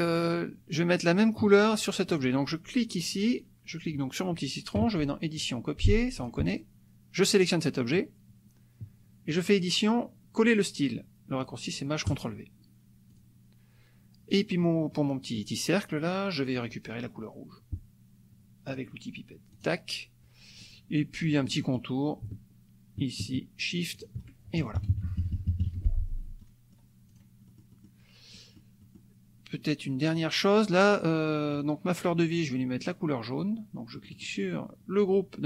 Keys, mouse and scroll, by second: 0.0 click, 2.2 click, 5.4 click, 6.2 click, 7.4 click, 9.3 click, 12.0 click, 13.1 click, 14.3 click, 14.9 click, 18.7 click, 19.6 click, 21.3-21.9 scroll up 1, 23.9 shift+click, 24.7 KP_Subtract, 25.8 F1, 26.4 click, 27.0 click, 27.5 click, 28.3 click, 31.5 click, 34.0 middle click, 34.0 scroll up 1, 34.2 click.